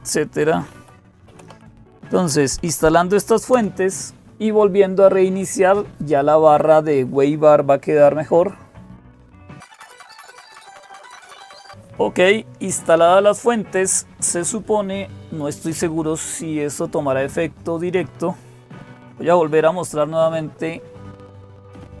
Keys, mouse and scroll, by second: 0.0-22.0 typing, 9.6 click, 10.0 Return, 21.7 click.